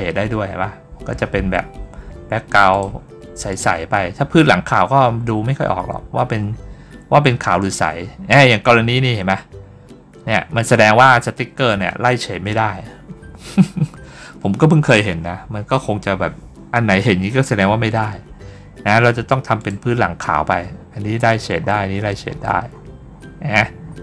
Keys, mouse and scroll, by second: 2.6 click, 3.3 click, 4.4 middle click, 4.8 middle click, 5.2 middle click, 6.0 middle click, 7.0 middle click, 7.1 scroll down 1, 7.9-8.2 scroll down 1, 8.2-8.5 scroll up 1, 9.1 scroll up 1, 13.9 scroll up 1, 14.5 scroll down 1, 15.4 scroll down 1, 15.9 scroll up 1, 18.1 scroll up 2, 18.2-19.1 scroll down 2, 19.4 click, 21.4 scroll down 2, 22.6 scroll down 2, 23.0 middle click, 23.7-24.0 scroll down 4.